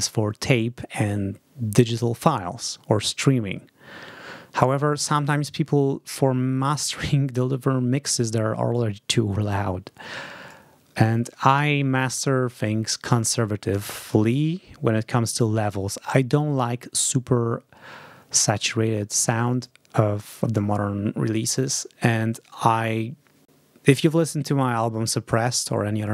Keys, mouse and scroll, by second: 19.5-20.7 drag.